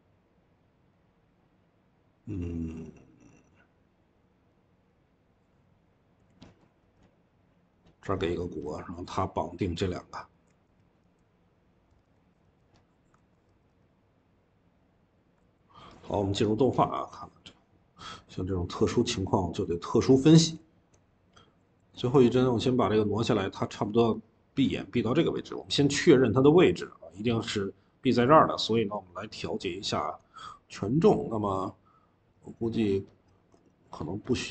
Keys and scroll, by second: 11.8 Escape, 11.9 Escape, 12.3 v, 13.0 ctrl+z, 15.3 ctrl+z, 18.8-20.4 typing.